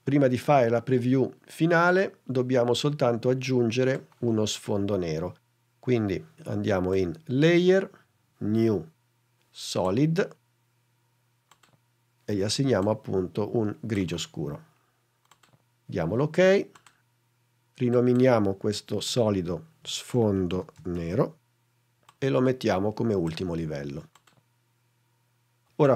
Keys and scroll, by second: 19.1 Return, 19.7-21.5 typing.